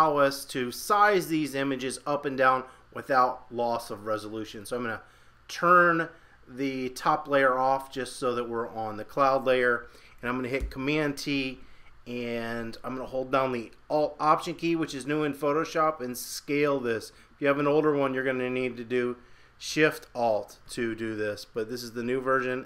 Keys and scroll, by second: 10.6 super+t.